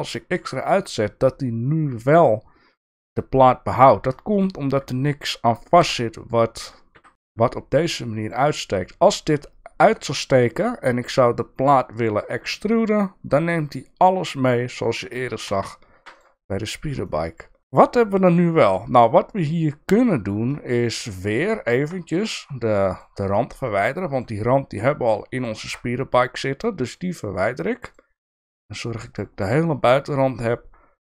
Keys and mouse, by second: 0.4 middle click, 5.8 e, 7.1 ctrl+z, 7.2 e, 15.5 ctrl+z, 16.2 click, 17.1-18.4 middle drag, 18.7-20.1 middle drag, 21.8 shift+middle click, 23.3 middle click, 26.9 shift+click, 28.4 shift+click.